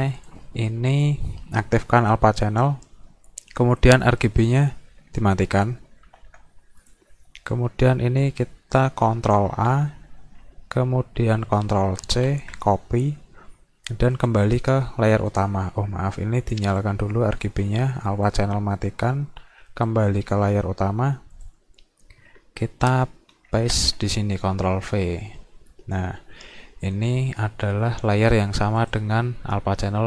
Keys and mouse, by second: 0.2 click, 1.0 click, 4.0 click, 4.4 click, 6.9 click, 9.4 ctrl+a, 12.1 ctrl+c, 14.1 click, 15.3 click, 16.7 click, 18.1 click, 19.7 click, 21.4 click, 23.6 ctrl+v, 28.8 click.